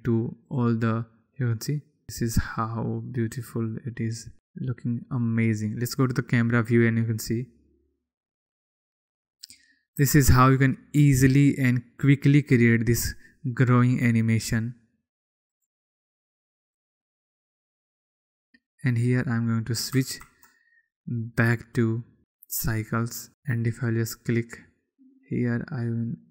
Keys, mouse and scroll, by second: 1.1 click, 6.4 click, 10.6 n, 16.2 click, 17.4 click, 20.0 click, 22.3-23.3 drag.